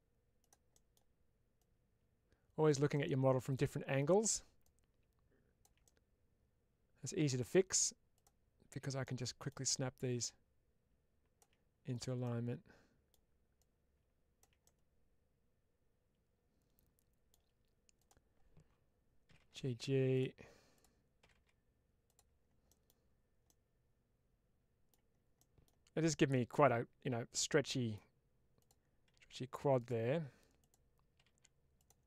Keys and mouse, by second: 0.7 middle click, 1.5-2.6 drag, 2.8 middle click, 3.9 click, 4.6 click, 5.7-7.1 middle drag, 8.0 click, 8.9 middle click, 10.1-11.3 drag, 11.8 click, 12.1 middle click, 13.5 click, 14.5-17.2 middle drag, 17.8 click, 20.0 click, 21.9 click, 22.5 middle click, 23.3-24.8 middle drag, 25.3 middle click, 27.2 middle click, 29.7 click, 30.5 click, 31.7 click.